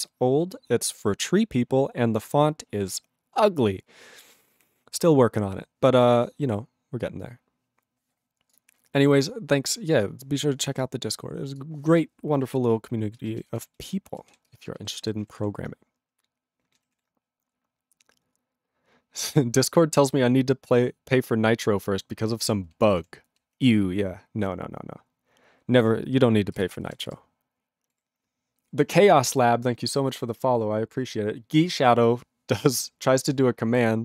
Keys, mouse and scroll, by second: 11.6 ctrl+s, 13.2 ctrl+space, 13.7 ctrl+alt+f, 13.8 ctrl+g, 14.3 ctrl+s, 14.5 ctrl+space, 14.9 ctrl+alt+b, 15.0 ctrl+g, 15.4 ctrl+s, 16.9 ctrl+s, 23.7 ctrl+s, 26.6 ctrl+space, 26.9 ctrl+alt+f, 27.1 ctrl+g.